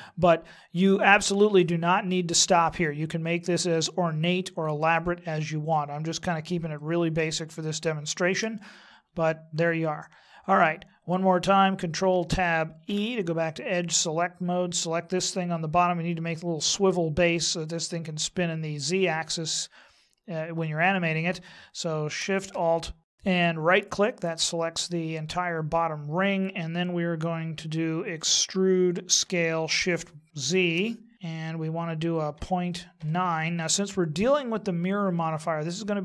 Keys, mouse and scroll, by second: 6.8 shift+middle click, 8.7 middle click, 12.1 ctrl+Tab, 23.0 alt+shift+right click, 29.1 e, 34.2 middle click.